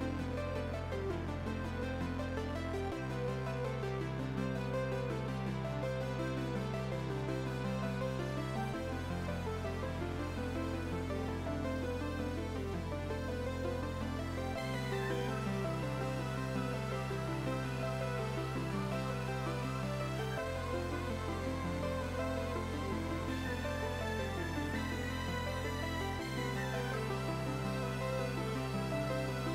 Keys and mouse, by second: 1.2 Delete, 1.4 click, 2.7 right click, 3.0 click, 4.6 click, 5.4 y, 5.9 click, 7.0 click, 7.4 right click, 7.9 click, 10.2 right click, 11.0 click, 12.9 2, 13.3 click, 13.6 5, 13.9 click, 14.1 5, 14.3 click, 16.3 ctrl+1, 16.4 click, 16.5 right click, 16.8 click, 18.3 click, 18.7 s, 18.9 ctrl+click, 19.9 ctrl+1, 20.0 click, 21.7 click, 25.1 click, 26.0 click.